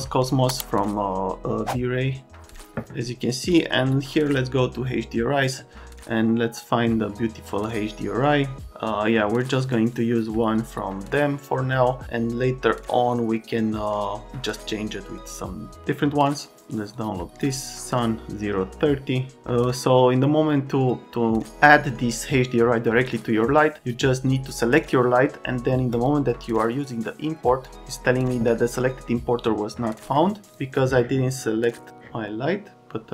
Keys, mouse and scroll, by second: 16.9 click, 25.9 click, 30.5 click.